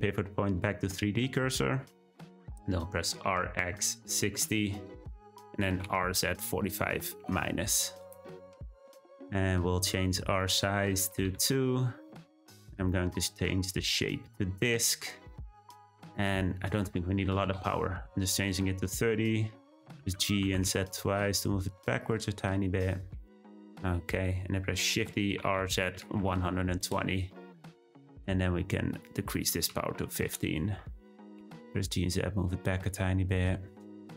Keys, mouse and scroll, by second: 3.1 r, 5.8 r, 10.4-12.9 drag, 13.1-18.7 drag, 20.0 g, 24.9 shift+d, 28.9-31.3 drag, 31.3 g.